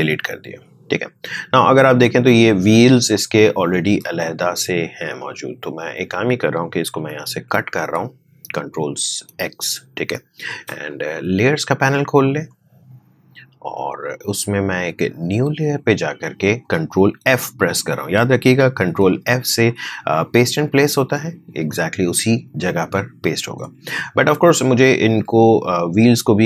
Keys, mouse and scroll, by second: 2.0 click, 5.1 shift+click, 6.9 ctrl+x, 10.8 click, 15.3 click, 19.0 ctrl+f, 20.7 click.